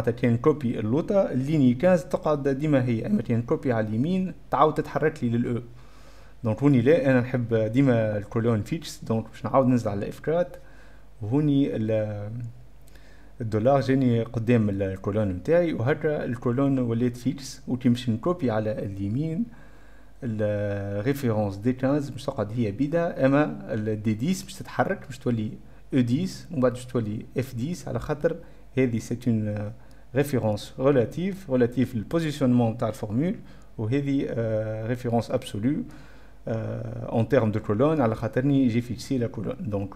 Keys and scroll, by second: 9.7 F5, 9.7 F4, 10.3 F4, 10.5 F4.